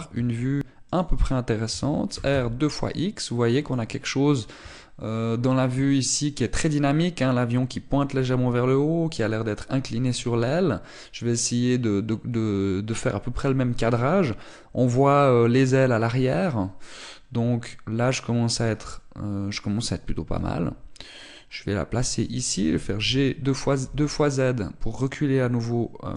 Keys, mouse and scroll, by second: 0.8 g, 1.7 click, 2.5 r, 4.5 click, 21.1 g, 22.9 click, 23.3 g.